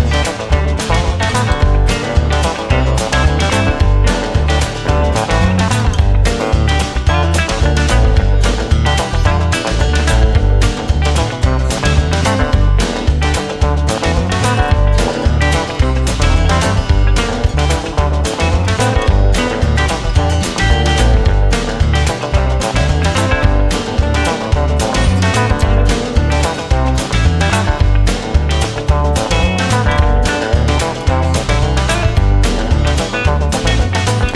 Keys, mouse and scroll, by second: 0.0 space, 2.2 right click, 3.1 right click, 3.4 right click, 3.8 right click, 5.2 right click, 5.9 right click, 6.5 right click, 6.7 right click, 7.0 right click, 7.4 right click, 7.7 right click, 8.6 right click, 8.9 right click, 9.9 right click, 10.2 right click, 10.6 right click, 11.0 right click, 12.2 right click, 12.7 right click, 13.4 right click, 16.8 space, 23.4 right click, 23.7 right click, 24.1 right click, 25.0 right click, 25.5 right click, 25.7 right click, 26.4 right click, 27.1 right click, 28.4 right click, 28.8 right click, 29.8 right click, 30.5 right click, 30.7 right click, 31.3 right click, 32.3 right click, 32.5 right click, 32.9 right click, 33.5 right click, 33.9 right click.